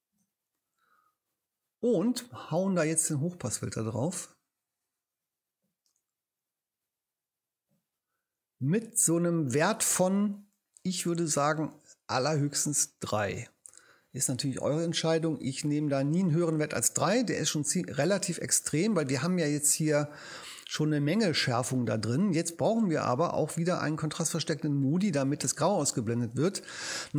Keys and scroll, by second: 0.1 Return, 13.0 3.